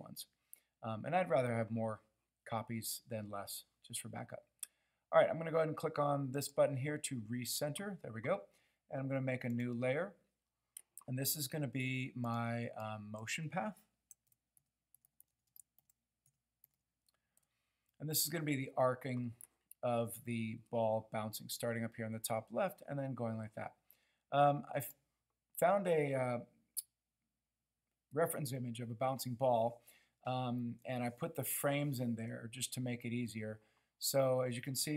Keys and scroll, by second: 14.3-16.7 typing, 17.4 Return.